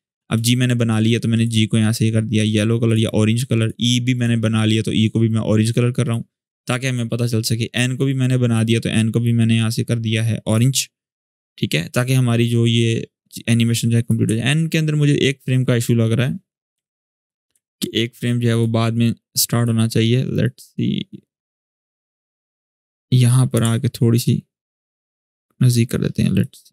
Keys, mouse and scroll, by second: 1.1 click, 11.8-14.0 click, 14.2 alt+scroll up 1, 16.5 u, 17.4-17.9 alt+scroll up 2, 17.9-18.5 drag, 23.2 click, 23.5-24.5 alt+scroll up 2, 24.5-25.5 drag, 26.2-26.7 drag.